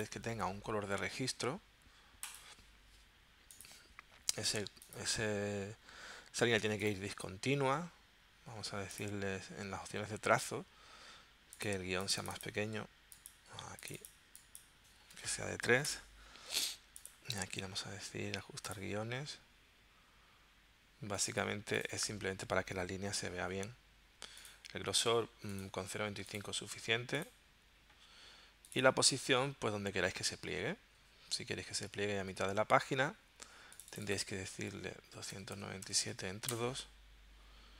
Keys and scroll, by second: 15.2 3, 15.9 Return, 34.9-36.1 typing, 36.5 Return.